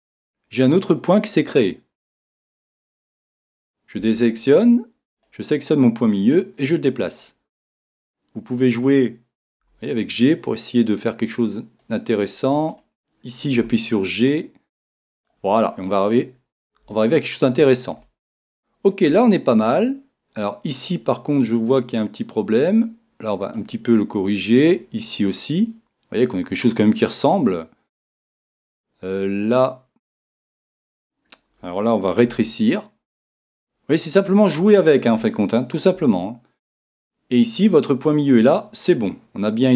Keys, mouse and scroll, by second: 1.5 click, 4.0 a, 5.2-7.2 right drag, 6.1 click, 7.9-10.8 right drag, 9.6 g, 12.0 click, 13.6-15.0 right drag, 13.6 g, 15.3 click, 16.9-22.8 middle drag, 22.8 click, 22.8 right click, 25.6 right click, 32.3-33.8 right drag, 32.3 g, 34.1 click, 34.4-39.7 middle drag, 37.1-39.7 right drag.